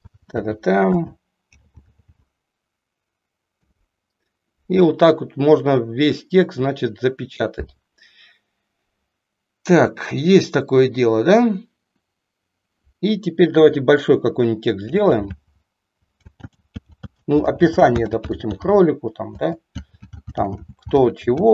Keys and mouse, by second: 0.3 g, 1.0 space, 1.5 k, 3.5 Return, 13.6 Return, 14.9-16.6 typing, 19.3-21.4 typing.